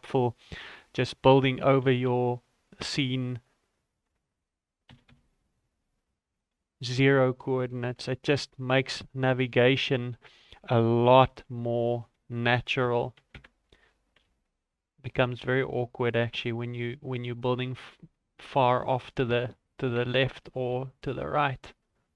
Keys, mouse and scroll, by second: 0.2-0.5 scroll up 6, 0.6 shift+middle click, 1.0-1.3 scroll up 3, 1.8 g, 6.5 scroll up 1, 6.5-7.4 scroll down 10, 7.4 shift+middle click, 7.9 scroll down 2, 8.1 shift+middle click, 8.6 right click, 9.7 click, 11.1 shift+d, 12.6 r, 13.9 scroll up 2, 14.2 g, 15.6 scroll down 1, 16.6 right click, 16.8 scroll up 2, 18.0 right click, 19.0 shift+s, 20.7 shift+g.